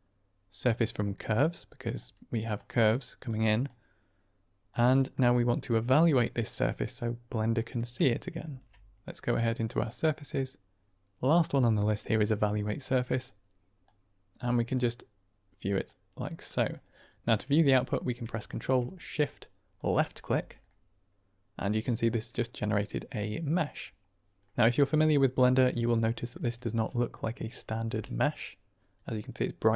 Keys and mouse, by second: 2.5-3.2 drag, 3.6-4.6 drag, 4.8 middle click, 5.5-6.9 drag, 7.3 middle click, 8.3 shift+a, 13.7-14.3 drag, 14.7-15.9 drag, 16.5 middle click, 19.7 ctrl+shift+click, 20.6-21.5 middle drag, 22.5-23.8 middle drag, 24.4 middle click, 26.0 middle click, 26.1 click, 26.5 shift+a, 27.8 g, 28.1 click.